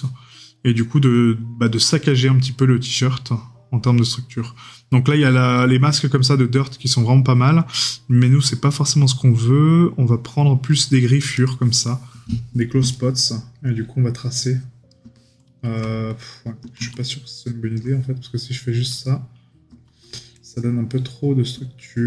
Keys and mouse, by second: 12.9 right click, 17.0 right click.